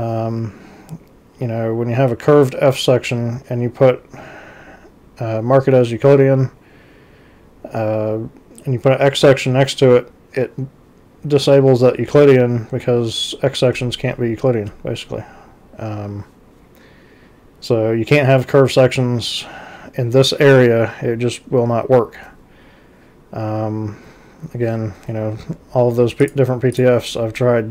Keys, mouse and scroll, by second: 26.3 click, 26.8 click.